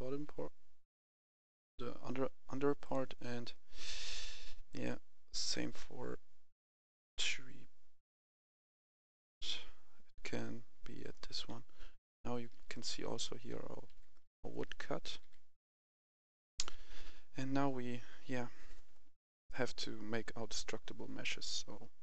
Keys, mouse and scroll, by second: 2.7 click, 5.4-6.7 scroll down 1, 6.8 scroll up 1, 8.1 click, 11.0 right click, 11.2-13.5 typing, 16.4 click.